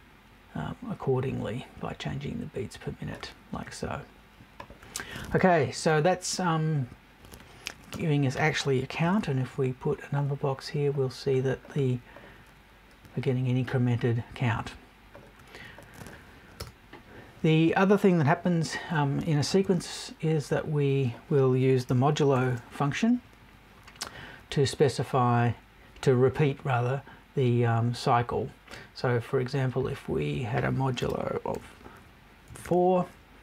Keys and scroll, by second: 7.9 BackSpace, 8.6 super+BackSpace, 16.6 BackSpace, 32.5 BackSpace.